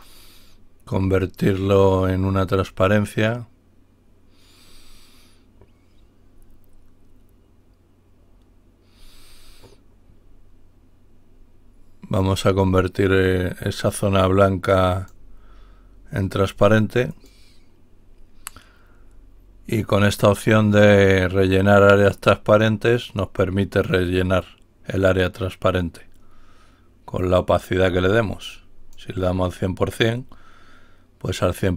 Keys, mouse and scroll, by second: 0.3 right click, 14.9 click, 17.0 click, 23.9 click, 27.1 click, 28.2-29.3 drag, 29.9 click.